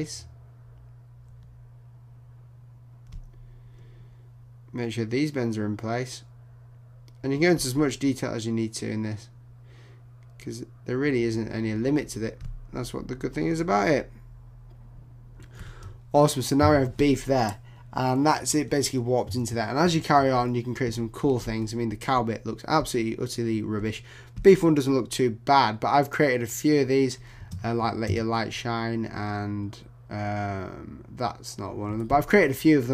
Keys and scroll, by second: 19.4 super+0, 19.8 super+-.